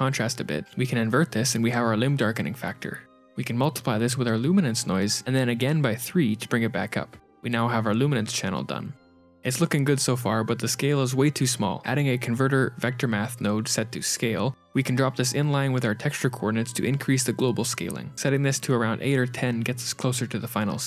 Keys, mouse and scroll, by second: 0.7 shift+a, 2.2 n, 3.2 shift+click, 3.6 g, 4.1 click, 4.7 click, 5.1 shift+d, 6.0 click, 6.9 click, 7.9 click, 8.8 ctrl+x, 8.8 click, 8.8 shift+a, 11.2 shift+right click, 12.3 click, 13.4 click, 14.8 click, 19.2 click.